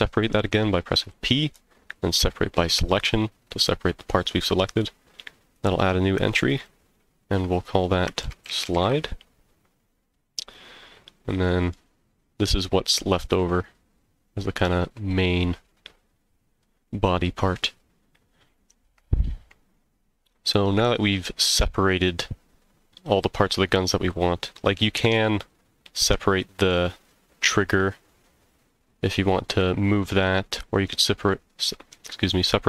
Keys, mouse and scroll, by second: 1.0 p, 5.1 scroll down 1, 6.4 click, 6.5-9.6 drag, 10.4 click, 11.0-11.7 middle drag, 12.8-13.4 scroll down 1, 13.4 scroll down 1, 24.4-24.8 scroll up 2, 24.8-25.2 middle drag, 26.2-26.7 middle drag, 30.4-30.8 scroll up 1, 30.8-31.9 middle drag.